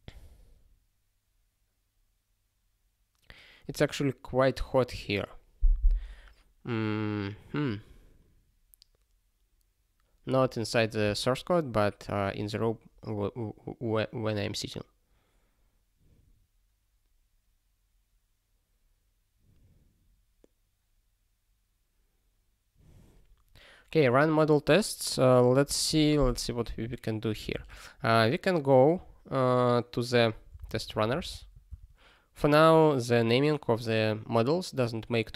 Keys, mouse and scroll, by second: 3.9-8.5 scroll up 1, 8.7 scroll up 1, 12.0 scroll up 1, 20.4 scroll up 1, 23.1 scroll up 1, 23.9 click, 24.1 double click, 24.2 click, 24.8 click, 33.3-33.7 scroll up 1.